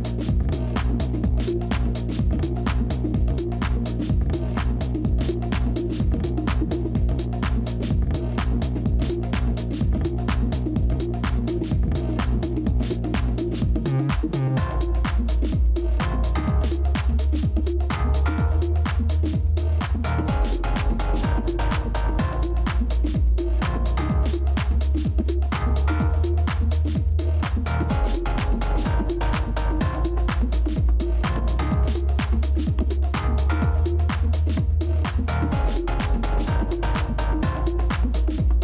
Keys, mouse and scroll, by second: 0.5 ctrl++, 0.6 ctrl++, 1.3 space, 12.9-13.7 typing, 14.8-15.5 typing, 16.7 ctrl+-, 16.9 ctrl+-, 17.4 space, 20.3 shift+click, 20.8 alt+click, 24.3 ctrl++, 24.4 ctrl++, 26.3 ctrl++, 26.6 shift+click, 28.5 ctrl+space, 28.5 ctrl+click, 29.2 space, 36.0 ctrl+-, 36.2 ctrl+-, 36.3 ctrl+-, 36.5 ctrl+-, 36.6 ctrl+-, 36.7 ctrl+-, 36.9 ctrl+-, 37.0 ctrl+-, 37.2 ctrl+-, 37.7 space.